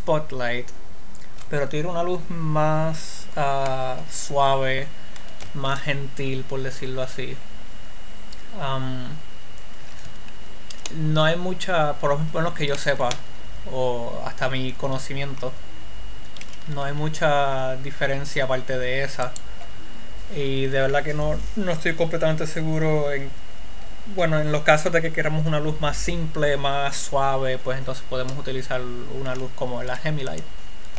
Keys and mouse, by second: 6.2 shift+a, 13.2 middle click, 16.9 r, 20.0 click, 30.3 x.